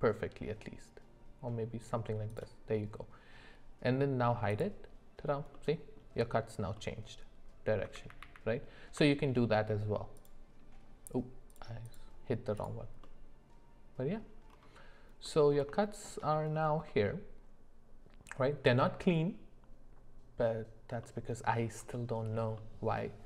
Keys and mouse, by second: 4.5 click, 5.5 middle click, 6.7-7.8 middle drag, 8.2 ctrl+z, 8.4 ctrl+z, 10.2 click, 11.5 click, 11.8 click, 12.6 click, 13.0-14.2 middle drag, 15.2 middle click, 15.8 shift+middle click, 16.9-19.0 middle drag, 21.0 middle click, 21.9 shift+middle drag, 22.6 middle click.